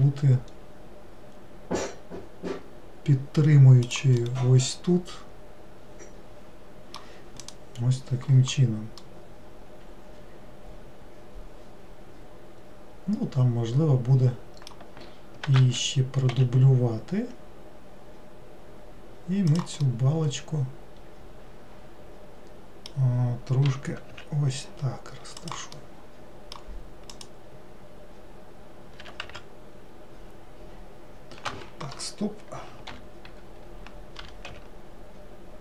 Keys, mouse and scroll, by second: 0.0 g, 4.3-7.4 middle drag, 9.1-12.2 middle drag, 15.7 shift+d, 20.0-23.0 middle drag, 25.9-27.2 middle drag, 27.2 click.